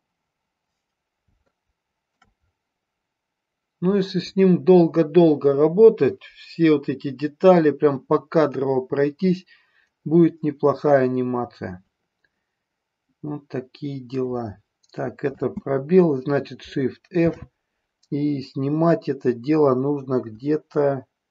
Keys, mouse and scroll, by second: 1.5-2.2 shift+middle drag, 15.4 space, 17.3 shift+f, 20.3 Up, 20.8 Up, 20.9-21.3 Up.